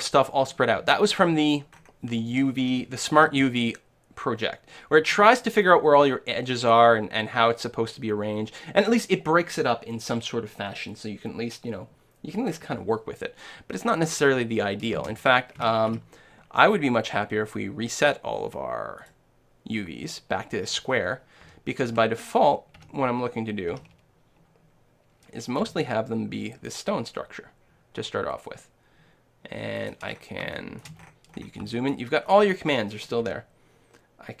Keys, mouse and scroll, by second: 1.3 middle click, 1.7-3.2 scroll up 1, 3.2 scroll up 1, 3.2 u, 3.3 middle click, 15.0 space, 15.9 u, 21.5 a, 21.9 a, 22.8 a, 23.7 s, 25.8 g, 30.1-34.3 middle drag, 33.3 g.